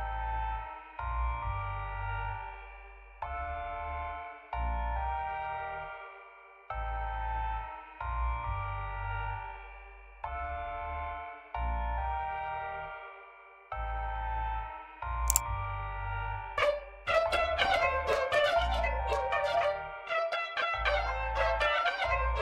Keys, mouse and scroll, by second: 3.9 click, 4.6 click, 6.3 1, 8.4 click, 11.5-12.7 drag.